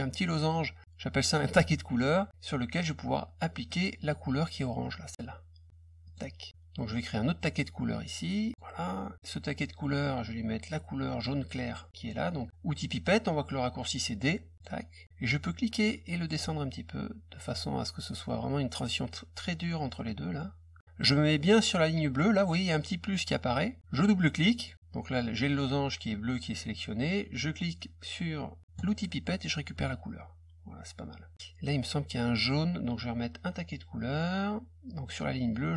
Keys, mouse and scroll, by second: 3.6 click, 6.0 click, 6.9 click, 14.1 click, 14.5 click, 15.8-18.1 drag, 19.9 click, 24.4 click, 24.5 click, 28.7 click, 29.7 click, 31.1 click, 34.1 click.